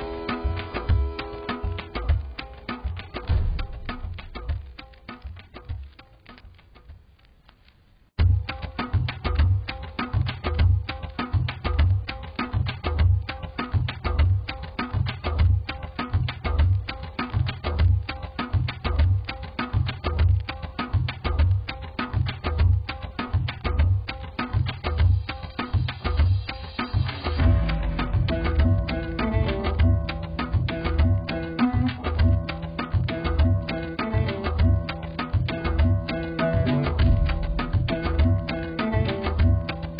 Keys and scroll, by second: 12.6 x, 22.5 x.